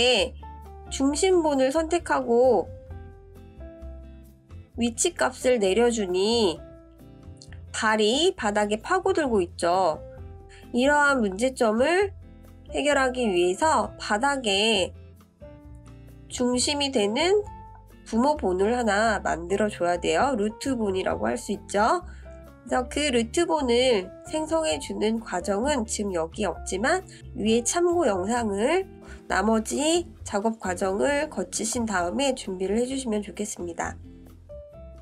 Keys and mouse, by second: 2.1-3.7 drag, 7.5-8.6 drag, 9.4 ctrl+z, 10.0-11.0 middle drag, 11.2-11.6 shift+middle drag, 12.1 shift+drag, 12.1 shift+middle drag, 12.3 shift+click, 12.4 shift+middle click, 13.9-14.5 middle drag, 15.3-25.5 drag, 29.7 click, 34.6-35.0 drag.